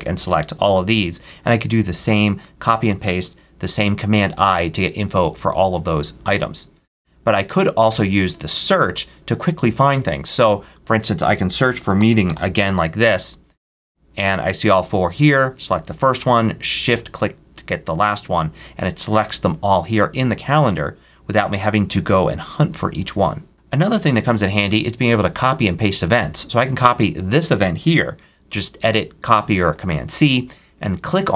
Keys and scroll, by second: 11.1-12.7 typing, 29.6 super+c.